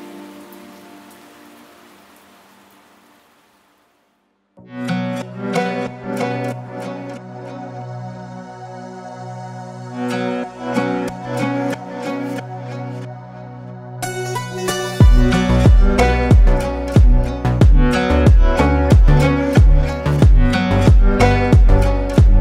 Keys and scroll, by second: 0.6 shift+a, 9.9 KP_1, 10.1 KP_6, 10.4 Return, 14.1 s, 16.1 z, 17.7 g, 20.2 Tab.